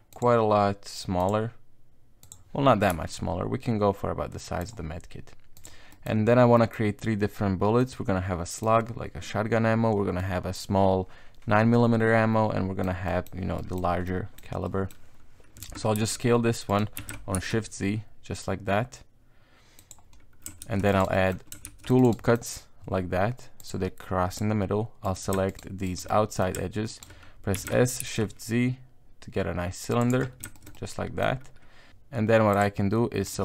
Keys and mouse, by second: 1.2 click, 2.2 click, 2.9 s, 5.6 click, 5.9 middle click, 6.6 middle click, 7.8 middle click, 10.2 click, 10.7-12.8 middle drag, 13.1 click, 13.5 middle click, 14.1 middle click, 14.6 middle click, 15.6 Tab, 16.0 s, 16.9 s, 20.6 ctrl+r, 21.1 middle click, 21.6 ctrl+r, 22.2 middle click, 23.6 click, 24.3 click, 25.0 right click, 25.5 shift+right click, 25.8 shift+right click, 26.1 middle click, 26.9 shift+right click, 27.5 s, 30.1 Tab, 30.2 middle click, 30.5 shift+middle click, 30.7 middle click, 32.5 click, 33.3 right click.